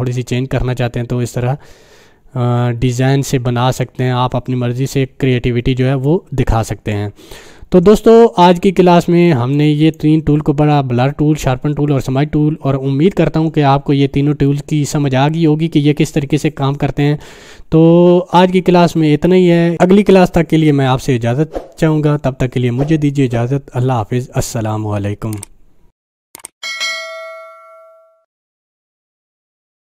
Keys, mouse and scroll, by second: 9.5 click, 9.8-10.1 drag.